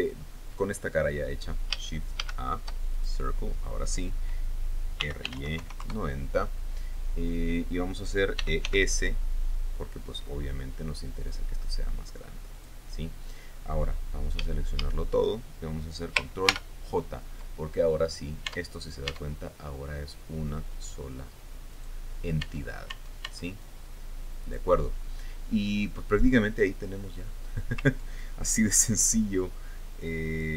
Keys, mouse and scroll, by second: 0.5-0.8 scroll down 2, 1.6-1.9 scroll up 2, 2.2 scroll down 3, 2.8 shift+a, 3.6 shift+click, 5.3-6.3 typing, 6.4 KP_Enter, 9.0 e, 9.2 s, 13.1 click, 15.0 a, 17.0 ctrl+j, 18.6 scroll down 2, 19.0 Tab, 19.7 Tab, 22.3 right click, 23.0 Tab, 24.2 click, 25.5-25.9 scroll down 2, 26.4-26.8 scroll down 2, 29.4-29.9 scroll up 2.